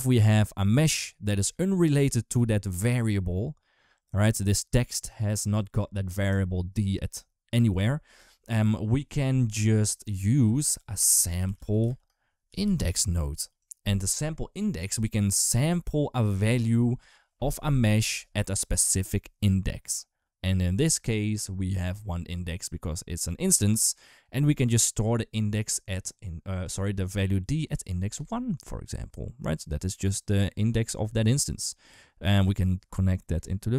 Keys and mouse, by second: 0.9 click, 10.2 click, 11.0 shift+a, 14.0 click, 14.2 click, 14.8 click, 15.5 click, 23.1 click, 27.9 click, 32.2-33.2 drag.